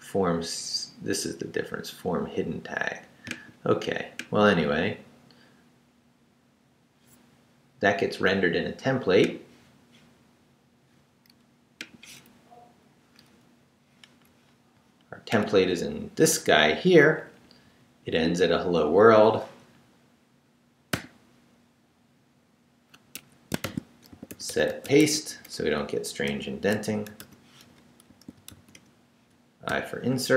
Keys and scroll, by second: 16.8 Down, 20.9 o, 23.1 Escape, 23.4-29.7 typing.